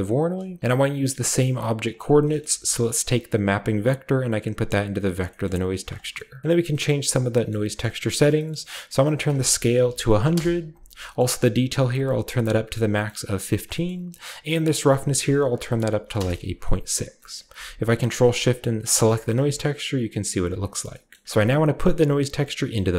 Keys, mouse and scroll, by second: 0.1-0.6 middle drag, 0.6 g, 2.0-3.4 scroll up 1, 2.4-5.0 middle drag, 2.4 a, 3.4-6.7 drag, 3.4-5.0 scroll up 1, 5.6 middle click, 6.4-7.9 scroll up 1, 6.8 middle click, 7.5 middle click, 7.8 middle click, 7.9-9.1 scroll down 1, 8.3 typing, 9.1 click, 9.7 typing, 10.3 Return, 11.1-12.8 middle drag, 12.8 click, 13.7-14.6 scroll up 1, 14.6-15.8 scroll up 1, 16.0 typing, 16.1 Return, 17.0-18.2 scroll down 1, 17.3-19.0 ctrl+shift+middle drag, 18.2-19.0 ctrl+shift+scroll down 1, 19.0-20.9 ctrl+shift+drag, 20.0-22.7 scroll down 1, 20.7 typing, 21.1-21.6 shift+middle drag, 21.4-22.9 shift+drag.